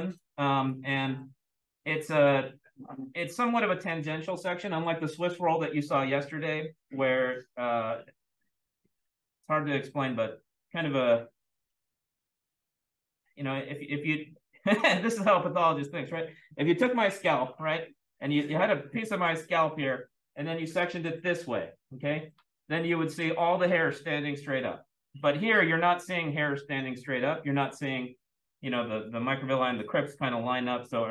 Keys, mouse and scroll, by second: 0.0 click.